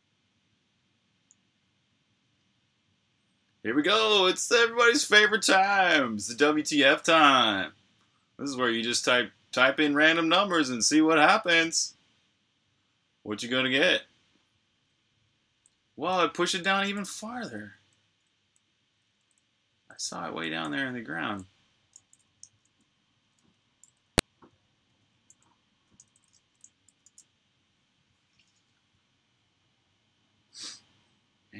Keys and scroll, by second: 0.0 super+h, 15.1-19.4 typing, 21.5-22.3 typing, 22.4 super+q, 24.3-28.0 typing, 28.2 super+h.